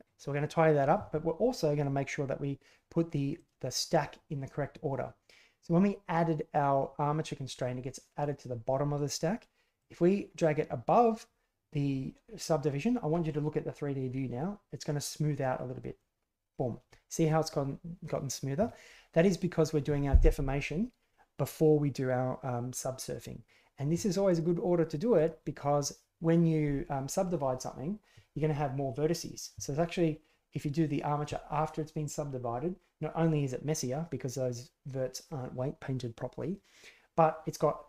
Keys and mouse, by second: 9.7-16.0 drag, 24.3 drag.